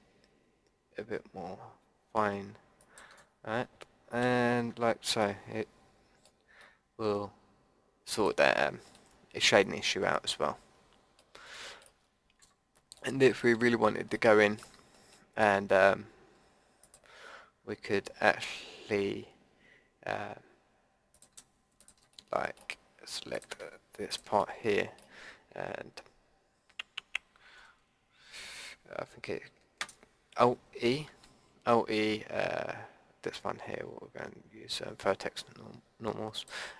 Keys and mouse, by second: 4.2 a, 4.7 Tab, 4.9-7.4 middle drag, 8.5-8.9 middle drag, 9.9-10.9 drag, 11.2-11.5 middle drag, 11.5-12.4 drag, 12.4 Tab, 14.4 middle click, 16.8-26.1 middle drag, 31.1 alt+e.